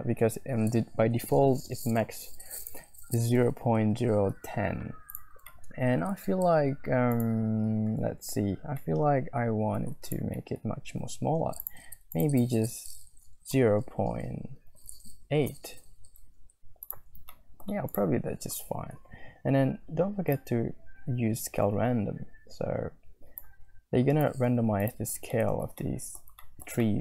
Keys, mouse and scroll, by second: 5.5 middle click, 5.6 click, 5.8 click, 5.9 middle click, 6.1 scroll up 1, 8.9 scroll down 1, 9.0 middle click, 9.7-10.1 scroll down 2, 10.4 middle click, 10.4-11.4 scroll up 2, 10.5 click, 11.6-12.7 scroll up 1, 12.7-16.2 middle drag, 16.2 scroll up 1, 17.3 middle click, 17.6-18.0 scroll up 2, 21.0-24.1 shift+drag, 25.3 shift+middle click, 25.7 scroll up 1, 25.8 middle click, 26.4 shift+scroll up 1, 26.5 shift+middle click, 26.6 click, 26.8 click.